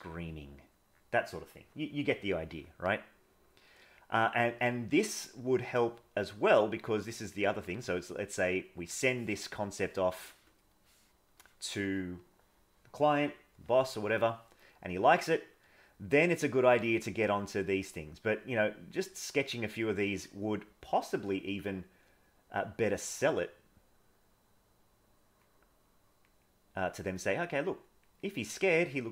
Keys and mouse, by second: 2.9-4.0 drag, 4.2 click, 4.6 click, 5.3-6.7 drag, 6.8 click, 7.5 click, 8.0 click, 8.4 click, 10.8 middle click, 14.0 middle click, 15.1-16.2 drag, 16.4 click, 16.9 click, 17.5 click, 18.9 click, 20.1 click, 20.7 click, 21.1 click, 22.3 click, 23.3 click, 24.0 click, 25.0 click, 25.9 click, 26.5 click, 27.0 click, 27.6 click, 28.3 click.